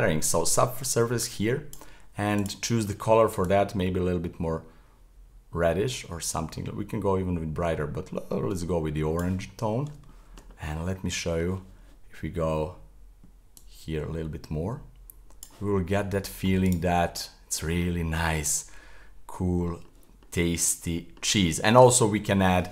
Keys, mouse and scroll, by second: 0.3-2.4 drag, 9.5-10.1 scroll up 3, 10.1-10.8 shift+middle drag, 10.8-13.1 scroll up 1, 13.1 middle click, 13.6-15.7 drag, 15.7-16.0 scroll down 2, 16.0-16.7 middle drag, 16.7 right click, 17.0-18.1 middle drag, 18.1 scroll up 2, 18.4-19.9 middle drag, 19.9-20.4 scroll down 4, 20.4-22.7 middle drag.